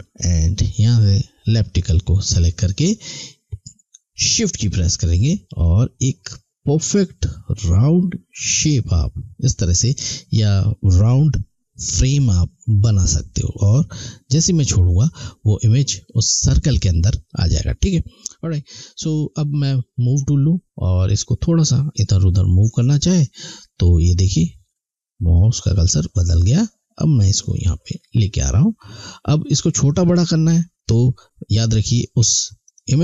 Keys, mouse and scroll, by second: 5.0 shift+Num_Lock, 5.6 shift+click, 18.8 click, 25.7 click, 32.6 click.